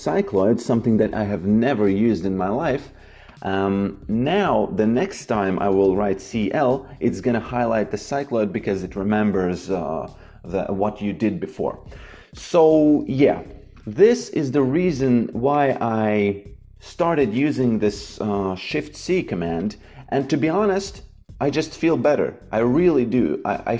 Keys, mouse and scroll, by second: 0.1 click, 4.9 Delete, 5.6 shift+c, 12.3 click, 17.5 shift+c, 19.5 click.